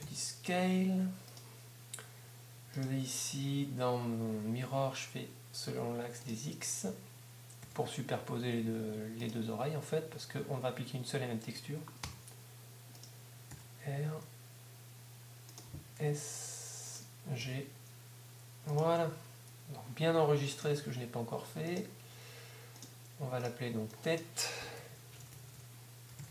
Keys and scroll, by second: 1.2 s, 7.6 g, 9.2 g, 12.0 g, 13.2 g, 17.2 s, 17.4 g, 19.2 g.